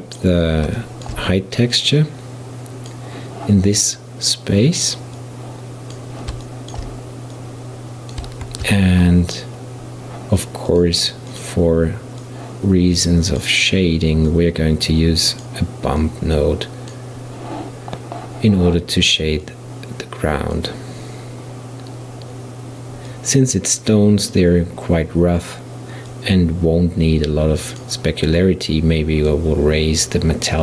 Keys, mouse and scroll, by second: 0.8-1.8 shift+middle drag, 1.8-4.8 drag, 5.2-6.5 drag, 6.5-7.4 shift+middle drag, 7.4-8.5 drag, 8.5 shift+a, 12.3 click, 14.3 click, 16.0-19.1 drag, 19.5-22.5 drag, 23.1-30.6 drag.